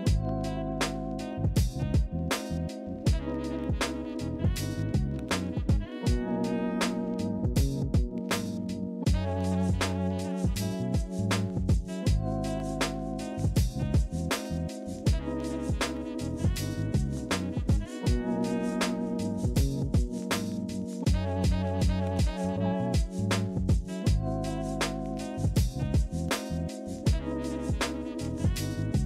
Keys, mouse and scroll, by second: 0.7 alt+scroll, 1.1 alt+scroll up 3, 1.3 ctrl+[, 3.1 alt+scroll, 4.4 alt+scroll, 4.5 ctrl+z.